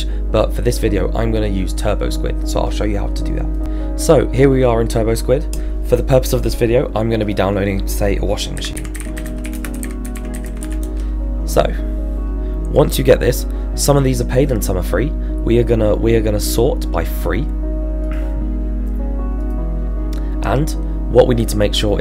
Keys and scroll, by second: 8.6-10.6 typing, 10.8 Return.